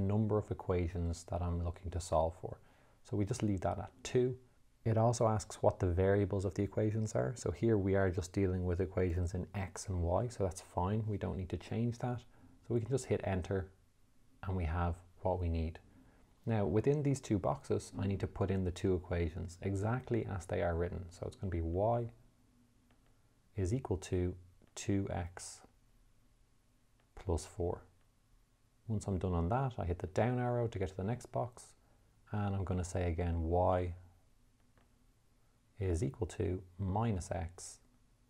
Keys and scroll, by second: 13.8 Return, 22.1 y, 23.4 =, 25.2 2, 26.2 x, 28.5 4, 30.4 Down, 33.8 y, 35.1 =, 36.4 -, 37.7 x.